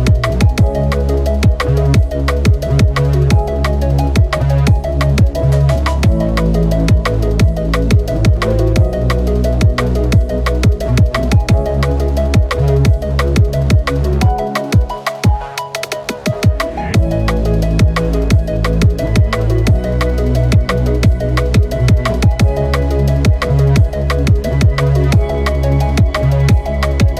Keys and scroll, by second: 7.4 ctrl+z, 7.9 ctrl+z, 24.2 ctrl+z.